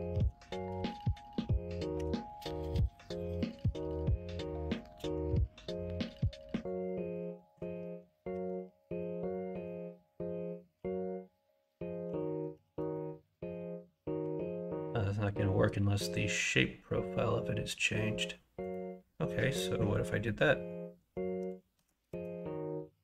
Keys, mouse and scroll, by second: 0.1 KP_1, 0.3 KP_3, 0.7 alt+z, 1.9 2, 3.5-4.7 right drag, 6.2 1, 8.3 ctrl+b, 12.6 ctrl+z, 14.2 g, 21.7 ctrl+b.